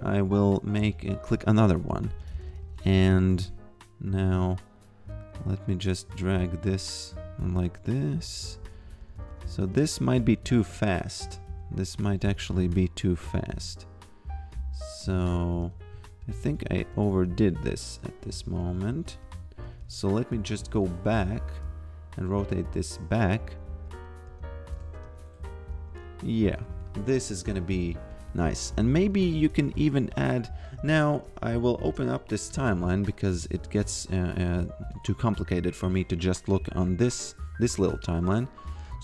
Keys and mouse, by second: 1.4 click, 1.9 a, 4.2 click, 7.4 a, 7.9 f, 8.6 a, 9.7 f, 10.5 a, 12.0 g, 13.5 a, 15.2 g, 15.6 f, 16.2 a, 16.8 g, 18.3 a, 20.7 click, 23.9 f, 25.1 f, 26.5 a, 29.0 g, 31.8 shift+F3, 33.1 click, 33.8 alt+h, 34.9 click, 37.1 click, 38.9 click.